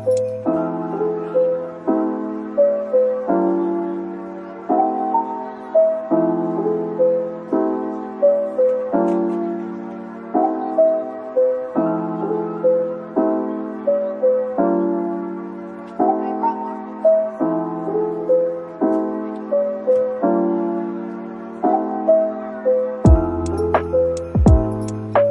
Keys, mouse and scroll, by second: 0.7 Tab, 1.6 Tab, 2.6 typing, 6.1-6.9 typing, 8.9 typing, 10.8 typing, 14.6 alt+click, 16.2 right click, 18.6-19.4 scroll up 1, 22.4 typing, 25.0 typing.